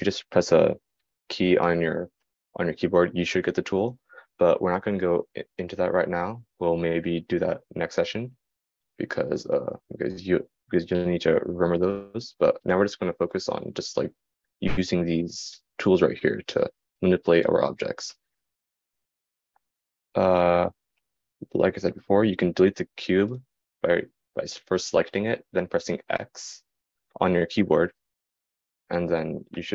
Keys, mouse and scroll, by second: 5.6-6.8 middle drag, 5.6-6.8 right drag, 10.3-29.7 right drag, 18.7-22.0 drag, 22.0-29.7 middle drag.